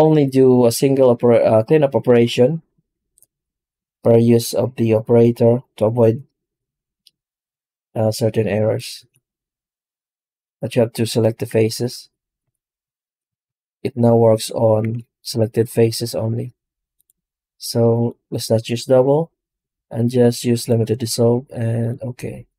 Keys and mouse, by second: 11.4 Tab, 12.2 w, 13.3 shift+a, 14.7 shift+c.